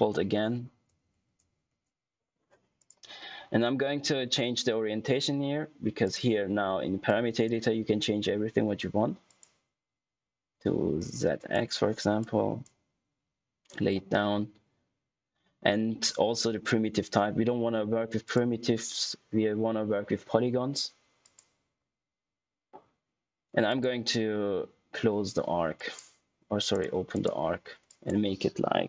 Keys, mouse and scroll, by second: 2.7 click, 6.0 click, 18.2 click, 21.1 click, 23.6 click, 25.7 click.